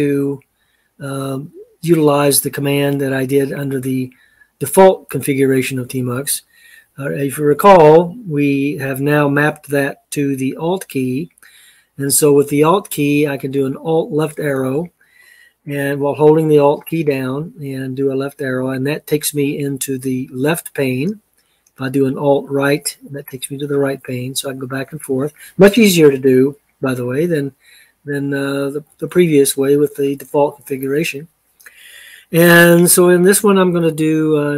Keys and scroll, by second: 13.7 alt+Left, 22.6 alt+Right, 24.1 alt+Left, 28.7 Escape.